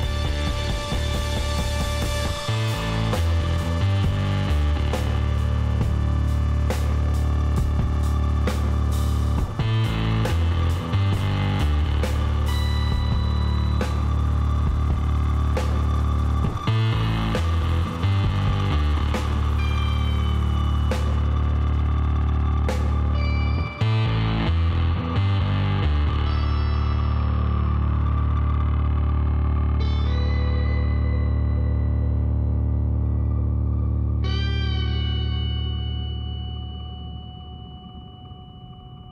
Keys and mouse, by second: 2.6-6.6 middle drag, 7.3-9.2 middle drag, 10.9-12.9 middle drag, 12.2 a, 12.9 KP_1, 14.9-16.2 middle drag, 16.3 middle click, 17.3 middle click, 17.6-19.5 drag, 18.0 Tab, 19.5-20.8 middle drag, 21.4-24.4 middle drag, 23.4-24.4 drag, 24.4 KP_1, 25.7 z, 26.2 middle click, 26.6 middle click, 27.5 shift+d, 31.3 s, 33.0 s, 35.5 middle click, 36.6 e.